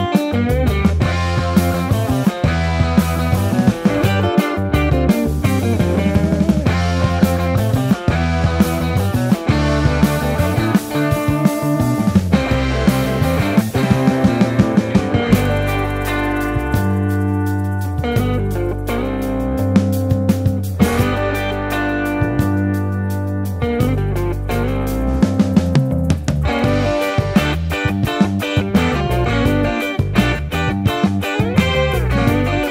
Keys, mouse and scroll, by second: 0.3 alt+z, 1.1 ctrl+KP_Add, 3.1 ctrl+KP_Add, 3.9 ctrl+KP_Subtract, 5.6 alt+z, 5.7 Tab, 6.2 click, 6.4 Tab, 7.0 ctrl+r, 7.9 ctrl+z, 9.8 ctrl+b, 12.4 ctrl+z, 12.7 ctrl+z, 14.3 ctrl+z, 17.7 Tab, 19.6-20.9 middle drag, 20.9 Tab, 21.2 3, 21.5 3, 22.3 ctrl+KP_Add.